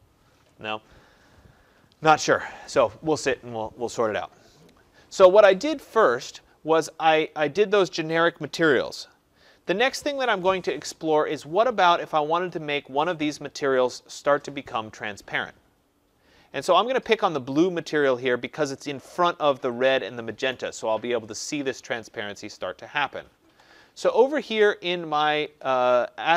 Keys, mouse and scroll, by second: 2.7 click, 6.9 click, 11.3 click, 17.9 click.